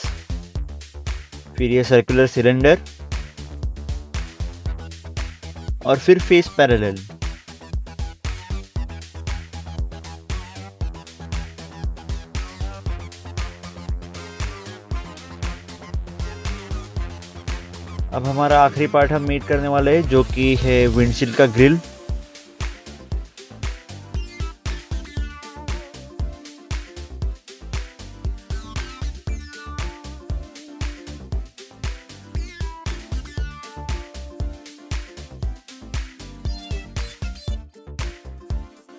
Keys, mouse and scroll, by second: 0.0 scroll up 1, 0.2 middle click, 0.7 click, 1.1 right click, 1.2 scroll down 1, 1.5 scroll up 1, 1.6 scroll down 1, 2.0 click, 2.4 right click, 3.2 right click, 3.5 scroll up 1, 4.0 click, 4.7 click, 4.8 scroll up 1, 5.1 middle click, 5.4 middle click, 5.4 scroll up 1, 5.6 scroll down 1, 5.7 scroll up 1, 5.9 scroll down 1, 6.8 click, 6.9 scroll up 1, 7.4 scroll down 1, 7.4 click, 9.7 click, 11.6 click, 12.0 scroll up 1, 12.8 middle click, 13.4 scroll down 1, 13.7 scroll up 1, 13.9 scroll down 1, 16.4 scroll down 1, 16.4 click, 17.4 click, 18.5 scroll down 1, 20.5 click, 22.8 middle click, 23.5 middle click, 23.7 scroll down 1, 26.3 scroll down 1, 26.6 scroll up 1, 26.7 scroll down 1, 28.3 click, 29.3 scroll up 1, 29.7 scroll down 1, 30.3 click, 31.1 scroll up 1, 32.1 click, 32.2 scroll down 1, 32.7 click, 33.0 click, 33.2 scroll up 1, 33.5 middle click, 33.9 middle click, 34.0 scroll down 1, 34.6 scroll down 1, 34.6 click, 35.1 click, 35.3 click, 35.5 scroll down 1, 36.3 click, 36.6 scroll up 1, 36.9 middle click, 37.6 scroll down 1, 38.1 click, 38.6 right click, 38.7 scroll up 1.